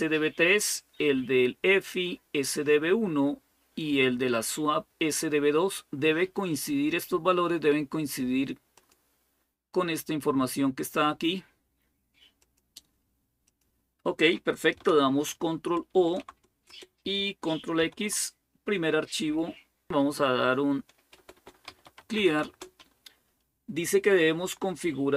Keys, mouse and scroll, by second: 8.5-14.0 drag, 15.9 ctrl+o, 16.5 Return, 17.6 ctrl+x, 19.6-22.6 typing.